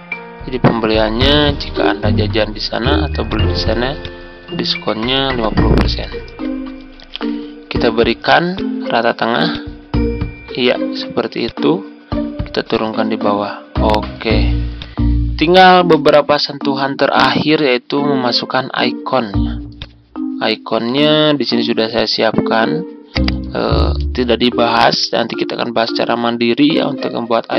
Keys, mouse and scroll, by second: 1.3 shift+5, 3.2-5.1 drag, 6.1 typing, 7.1 ctrl+a, 8.4-14.7 drag, 15.3-15.7 ctrl+scroll down 1, 19.7 click.